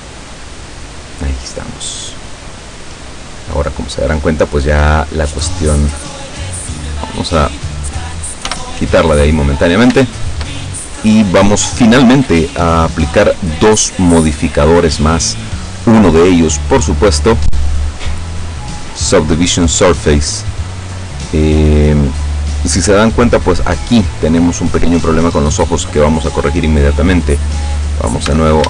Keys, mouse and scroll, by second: 0.0 scroll down 2, 0.4-4.6 drag, 4.8 scroll down 2, 5.4 scroll up 2, 5.8 scroll down 2, 6.8 right click, 8.5 h, 9.6 scroll up 2, 10.1 shift+middle click, 11.0-12.2 middle drag, 14.0 right click, 16.2 click, 17.0 click, 19.5 click, 27.4-27.7 scroll up 2, 28.0 scroll down 2, 28.4 Tab.